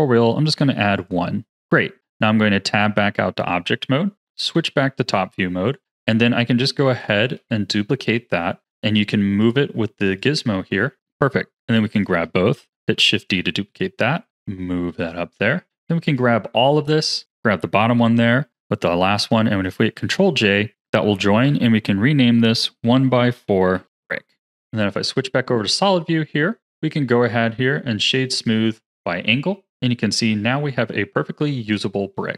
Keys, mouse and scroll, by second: 1.5 Tab, 4.3 KP_7, 5.3 z, 6.8 shift+d, 9.4 click, 11.9 shift+click, 12.7 shift+d, 13.9 click, 15.8 click, 17.1 shift+click, 19.9 ctrl+j, 21.4 F2, 24.3 z, 25.7-26.6 middle drag, 26.6-28.9 right drag, 28.9-31.9 middle drag.